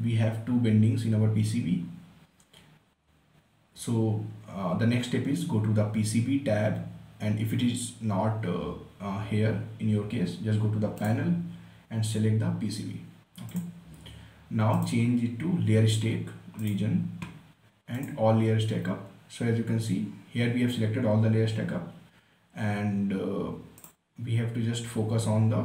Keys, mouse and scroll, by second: 1.7-3.6 scroll down 1, 11.3 click, 13.9 click, 20.9 scroll down 1, 24.1 click, 25.1 scroll down 1.